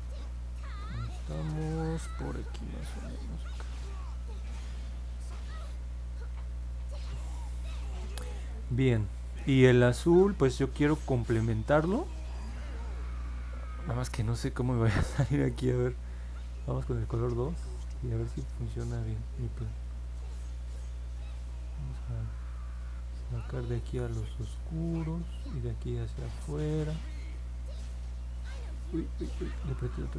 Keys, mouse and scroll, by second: 0.9 click, 1.4 click, 1.9 click, 2.5 click, 3.0 click, 3.6 click, 4.1 click, 4.8 click, 5.3 click, 20.5 click, 21.3 click, 21.9 click, 22.4 click, 22.9 click, 23.4 click, 24.0 click, 24.5 click, 24.9 click, 25.9 click, 26.4 click, 27.1 click, 27.5 click.